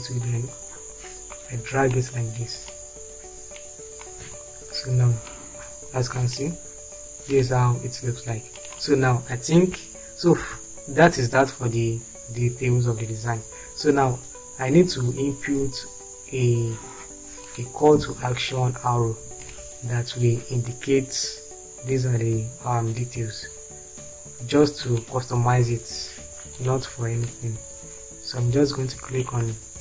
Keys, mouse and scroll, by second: 4.4 space, 9.7 Delete, 10.6 shift+F4.